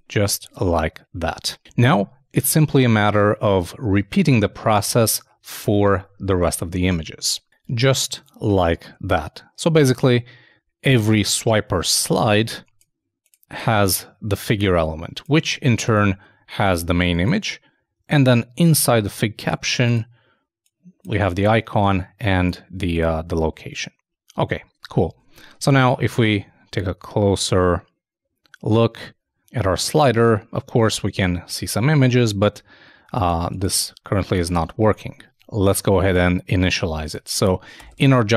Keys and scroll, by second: 0.0-0.2 typing, 25.2 super+Tab, 26.3 super+i, 34.6 super+Tab.